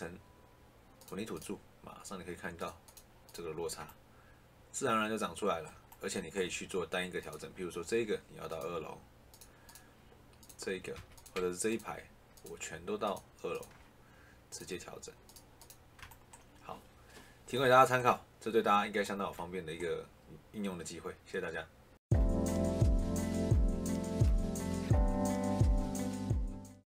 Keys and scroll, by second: 10.8 Escape.